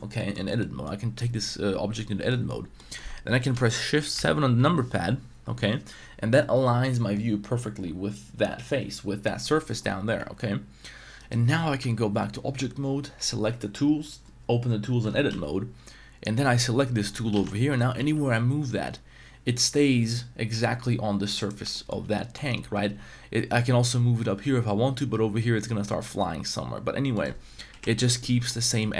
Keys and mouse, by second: 0.1 middle click, 0.6 middle click, 2.3 middle click, 2.7 middle click, 4.1 shift+KP_7, 10.2 Tab, 11.2 right click, 11.9 Tab, 15.3 z, 17.3 z, 18.0 g, 21.4 click, 21.7 shift+middle drag, 22.9 g, 27.7 KP_1, 28.1 z, 28.4 middle click, 28.9 z.